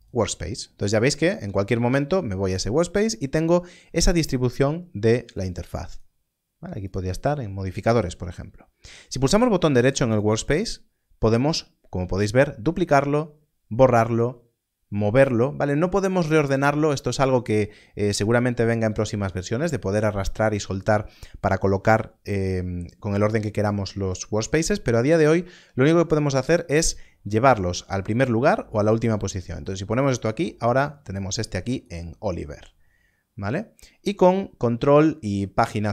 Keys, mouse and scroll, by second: 5.3 click, 10.0 right click, 29.5 right click, 31.1 click, 31.7 right click.